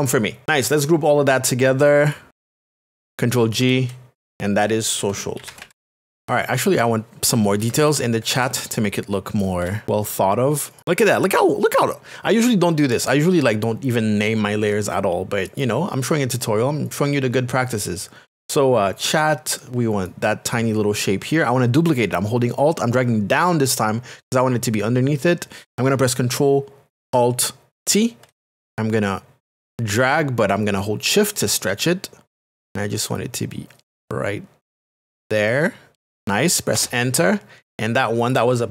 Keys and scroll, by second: 3.6 ctrl+g, 4.3-6.3 typing, 7.6 ctrl+KP_Add, 8.4 KP_Add, 28.4 alt+t, 36.7 Return.